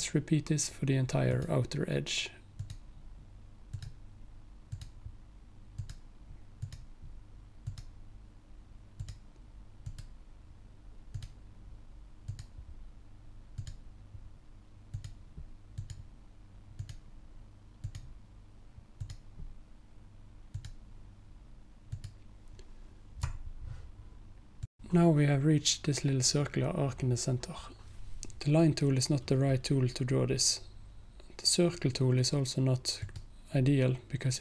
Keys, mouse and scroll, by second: 2.6 alt+click, 4.8 alt+click, 9.0 alt+click, 9.9 alt+click, 11.2 alt+click, 15.0 alt+click, 20.6 alt+click, 24.7 click, 33.1-34.4 drag.